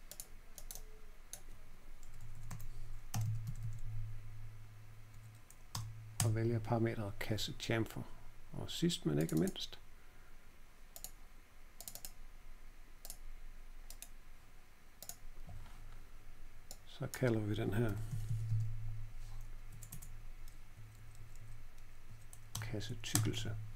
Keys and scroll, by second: 2.0 Delete, 2.1 Delete, 2.3 Delete, 2.4 Delete, 2.8-4.0 typing, 5.0 Page_Down, 5.7 Return, 6.1 Return, 17.5-19.8 typing, 20.7 Page_Down, 20.9 Page_Down, 21.1 Page_Down, 21.3 Page_Down, 22.0 Down, 22.5 Return, 23.1 Return.